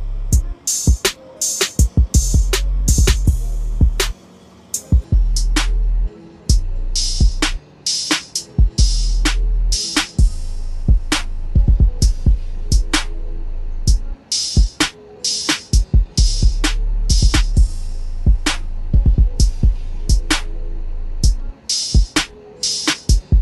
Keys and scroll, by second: 10.0 ctrl+a, 10.7 ctrl+c, 11.9 ctrl+n, 12.3 Return, 13.7 ctrl+v, 20.9-22.1 typing.